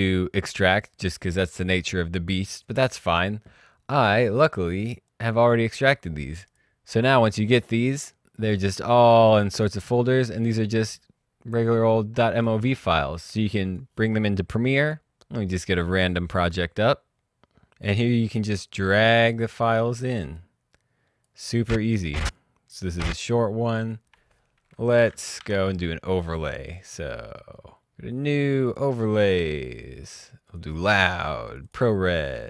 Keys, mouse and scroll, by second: 4.4 click, 6.3 click, 9.4-10.4 scroll down 1, 10.4 click, 11.8 scroll down 1, 13.6 click, 14.5 click, 17.2 click, 17.6 Delete, 17.9 click, 18.1 alt+Tab, 19.0 click, 19.3 click, 24.8 Delete, 25.3 Tab, 26.3 click, 30.0 click.